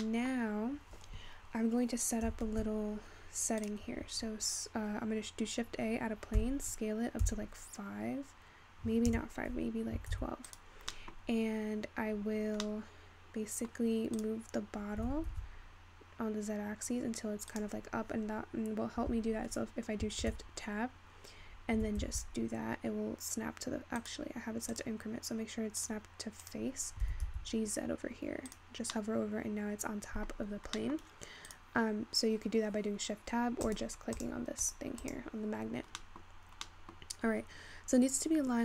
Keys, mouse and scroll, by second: 0.9-2.9 scroll down 6, 2.9 shift+a, 6.4 s, 11.0-11.3 middle drag, 11.3-12.6 scroll up 1, 12.6 scroll up 1, 12.7-13.9 middle drag, 13.9 scroll down 1, 14.2 click, 15.0 g, 20.0 shift+Tab, 20.7-21.8 scroll up 4, 21.8 g, 24.8-26.5 drag, 27.0 g, 28.9 scroll down 1, 29.1-30.7 middle drag, 30.7-31.5 scroll up 4, 30.9 middle click, 31.5-33.8 drag, 34.2 click, 34.7 click, 35.1 click, 35.7-36.0 scroll down 3, 36.0-36.4 middle drag, 36.4-36.8 scroll down 1, 36.9-38.6 middle drag.